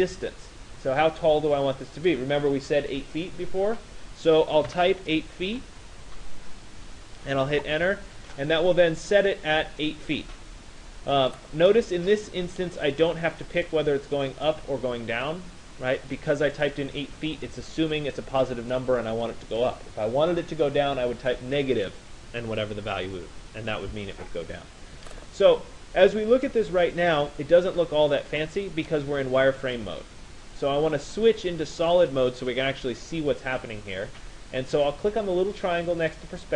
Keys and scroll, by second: 4.2 8, 7.8 Return.